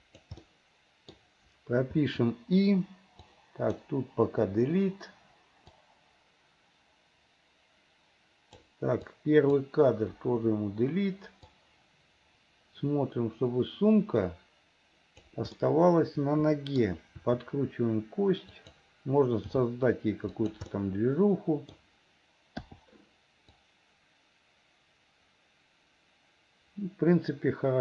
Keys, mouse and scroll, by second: 0.4 middle click, 2.0 i, 3.2 click, 4.5 Delete, 5.8-8.8 drag, 9.1 click, 10.2 Delete, 11.6-15.4 drag, 15.6-16.8 middle drag, 17.2 r, 19.6 g, 20.7-21.8 middle drag, 22.7 i, 23.6-27.8 drag.